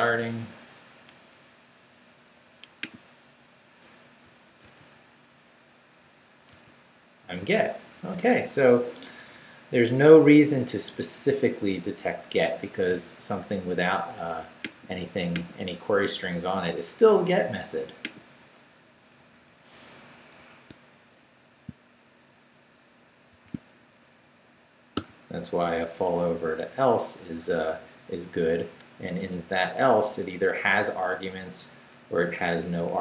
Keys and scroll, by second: 4.6 super+r, 6.5 super+r, 19.4 Up, 20.4 Escape, 23.3 shift+v, 23.8 shift+Down, 24.6 Down, 24.9 d, 25.8 Down, 29.1 Right, 29.9 Down, 30.6 Down, 31.2 Down, 32.2 Up, 32.8 Up.